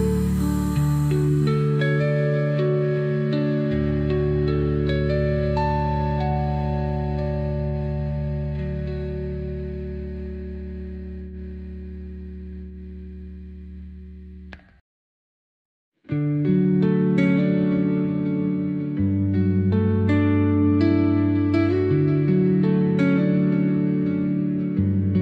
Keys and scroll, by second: 1.7 Caps_Lock, 2.5-3.6 typing, 5.4-7.1 typing, 8.4-9.4 typing, 9.7 Return, 10.8 Caps_Lock, 11.6-15.7 typing, 17.1-19.2 typing, 21.2 Left, 22.5 Right, 23.5 BackSpace, 23.7 Caps_Lock, 24.7 Caps_Lock, 24.9 b.